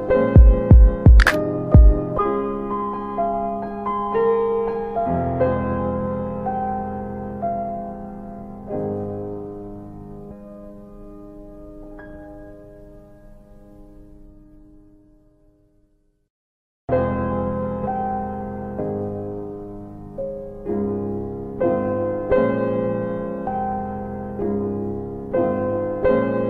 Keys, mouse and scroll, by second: 0.9 click, 2.2 click, 3.9 alt+middle click, 4.9 ctrl+shift+r, 5.9 alt+w, 6.3 alt+w, 7.3 middle click, 9.2 click, 11.5 alt+w, 12.1 alt+w, 12.9 middle click, 13.7 typing, 14.0 scroll up 1, 15.5 click, 17.7 alt+w, 17.9 alt+w, 18.6 alt+middle click, 20.7 middle click, 22.1 r, 22.3 shift+click, 23.2 middle click, 23.3-23.7 scroll up 1, 24.3 click, 26.0 double click.